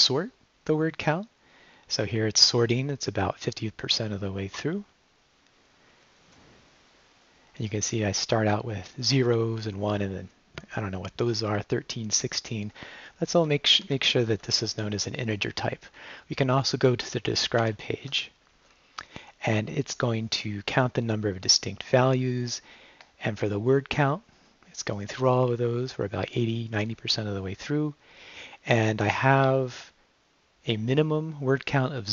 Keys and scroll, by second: 13.8 shift+#, 17.6 shift+i.